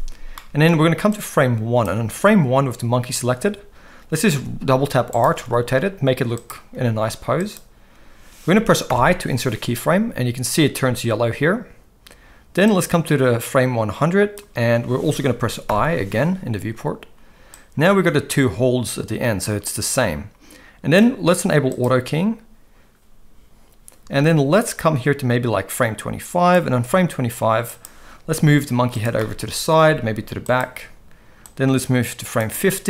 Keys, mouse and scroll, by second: 0.4 middle click, 1.1 click, 4.3 r, 5.4 r, 6.7 r, 8.9 i, 12.7-14.4 drag, 15.7 i, 17.6-21.0 drag, 24.7-26.5 drag, 27.6 click, 28.3 g, 29.2-29.8 middle drag, 31.4-32.4 drag, 31.4 g.